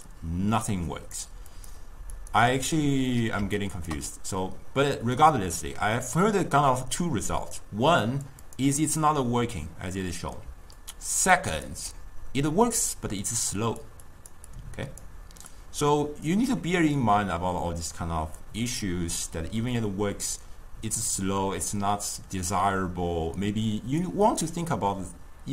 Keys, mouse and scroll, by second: 3.6 ctrl+right click, 5.2 click, 7.9 d, 8.1-8.4 drag, 8.4 d, 8.5 click, 8.6 d, 9.9-11.8 typing, 10.9 click, 11.6 click, 13.1-16.5 typing, 13.3 click, 14.6 click, 15.0 click, 15.6 click, 15.9 click.